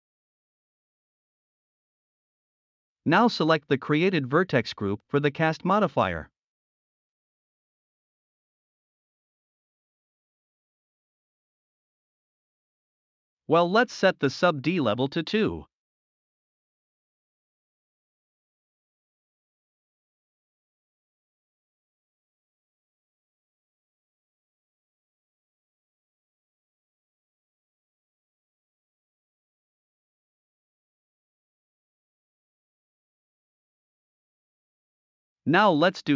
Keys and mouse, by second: 2.1 middle click, 2.8 middle click, 4.2 click, 4.9 shift+click, 6.3-7.8 middle drag, 8.5 middle click, 9.3 middle click, 9.6 Tab, 9.8 middle click, 10.3 middle click, 10.9-12.3 middle drag, 13.8 middle click, 14.7-15.0 middle drag, 15.4-16.1 middle drag, 16.5-17.7 middle drag, 19.5 click, 20.6-21.4 middle drag, 22.1-22.9 middle drag, 23.8-24.1 middle drag, 27.7-28.4 middle drag, 28.8-29.9 middle drag, 30.7-31.2 middle drag, 32.6 shift+click, 32.8 shift+middle drag, 33.3 click.